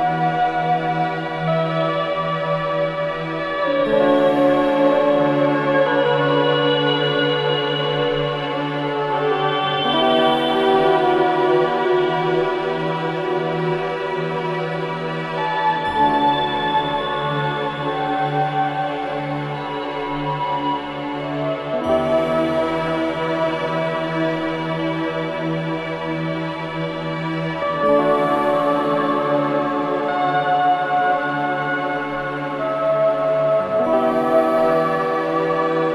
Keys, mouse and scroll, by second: 1.7 1, 2.4 alt+middle click, 4.0-6.3 drag, 6.3 ctrl+click, 7.9-9.3 right drag, 9.6-15.0 drag, 15.0 3, 17.1 click, 19.0 ctrl+Delete, 21.0 click, 23.2 ctrl+Delete, 24.5 click, 26.1 ctrl+Delete, 28.0 space, 28.1 click, 29.3 alt+right click, 30.0 5, 30.7 alt+middle click, 31.3 scroll up 1, 31.6 alt+middle click, 32.1-33.8 alt+drag.